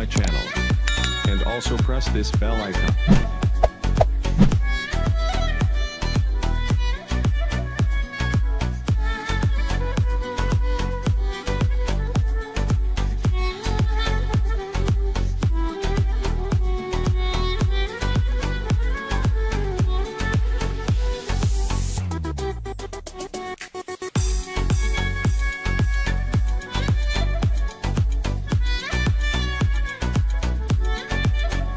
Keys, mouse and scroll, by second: 0.9 click, 2.5 click, 7.3 ctrl+j, 8.1 click, 8.6 right click, 9.1 click, 9.8 click, 10.6 click, 11.4 right click, 11.7 click, 12.1 right click, 12.9-17.9 alt+shift+drag, 17.9 Right, 18.5 click, 20.2 click, 23.1 click, 26.2-28.1 drag, 30.0 click, 31.6 click.